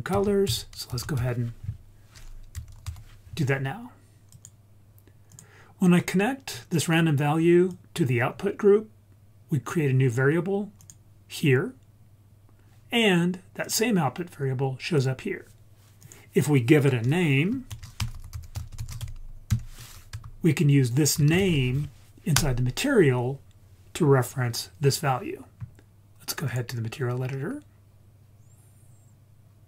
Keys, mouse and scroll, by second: 0.1 shift+a, 5.8-6.5 scroll up 3, 6.5-7.7 scroll down 1, 7.7-9.7 drag, 7.7-8.5 scroll down 1, 10.8 click, 13.6 click, 15.0 click, 16.0-22.4 drag, 18.1 t, 26.5-29.6 drag.